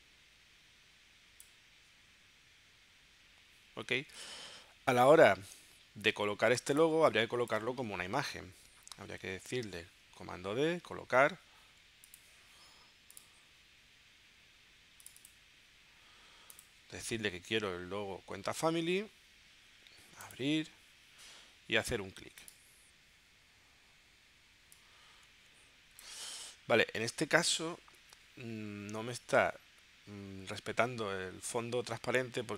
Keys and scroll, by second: 7.0 space, 9.6 super+d.